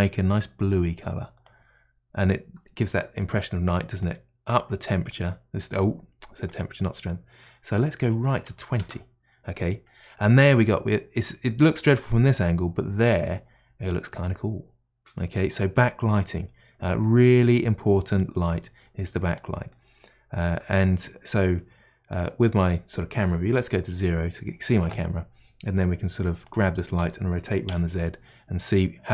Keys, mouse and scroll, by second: 0.0 middle click, 4.0-9.8 drag, 9.8-13.6 middle drag, 13.6-14.9 scroll down 2, 14.9-16.7 scroll down 1, 16.7 scroll down 1, 17.0-19.3 middle drag, 19.3 click, 19.7-23.6 middle drag, 23.5 KP_0, 26.4 click, 27.0 r.